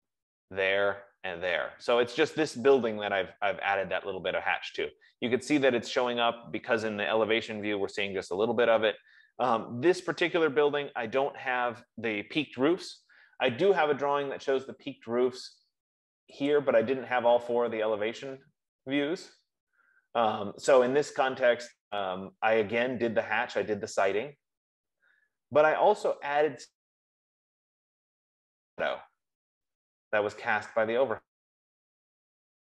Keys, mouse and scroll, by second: 0.1-0.5 scroll, 2.2 scroll, 2.7-3.4 scroll, 4.7 middle click, 4.9 middle click, 5.7 middle click, 5.9 middle click, 9.3 middle click, 9.6-10.2 scroll, 10.2 scroll, 11.1 Escape, 13.7 Escape, 16.9 click, 18.9-19.5 scroll, 21.0 scroll, 22.2 scroll.